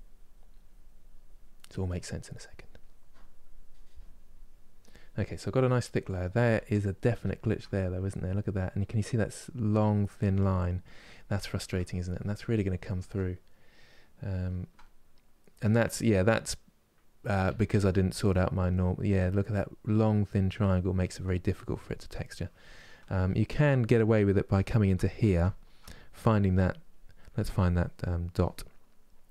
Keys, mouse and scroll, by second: 1.2 middle click, 1.8-5.0 drag, 5.0 middle click, 5.7 click, 6.2-7.7 ctrl+middle drag, 7.7-11.1 drag, 11.1-17.2 ctrl+middle drag, 17.2 Tab, 17.5-26.6 middle drag, 26.6 click.